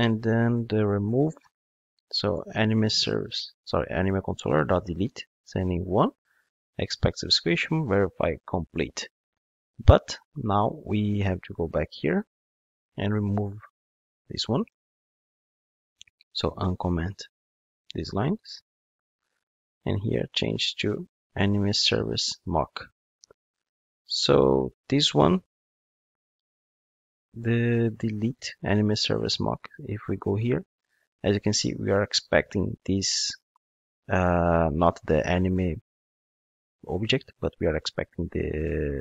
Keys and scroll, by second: 3.6 Return, 15.3 super+/, 16.0 super+z, 18.3 super+/, 22.0 Return, 30.3 super+b.